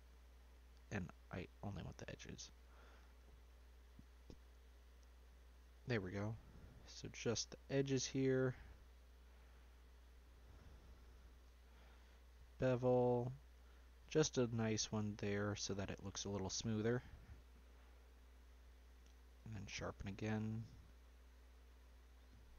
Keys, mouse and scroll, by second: 2.3 click, 3.4 click, 4.8 shift+click, 5.9 ctrl+click, 6.6 ctrl+click, 7.7 ctrl+click, 9.9 shift+click, 10.8 shift+click, 11.9 ctrl+b, 17.3 Tab, 18.9 q, 20.0-22.5 middle drag.